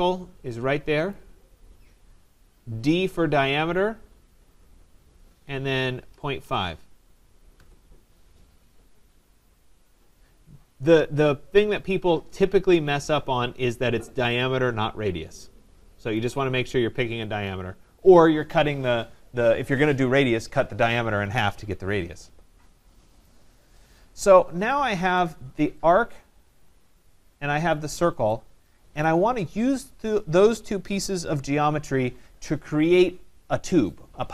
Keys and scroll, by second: 7.5 Return.